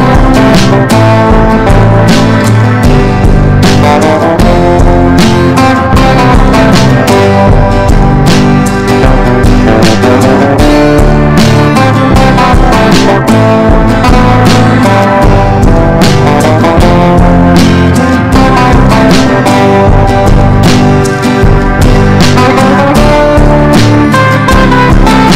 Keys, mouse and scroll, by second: 3.6 Left, 4.6 click, 5.1 click, 5.4 click, 7.2 ctrl+g, 7.7 ctrl+click, 9.3 ctrl+shift+g, 10.0-20.9 drag, 22.1 Delete, 22.4 click.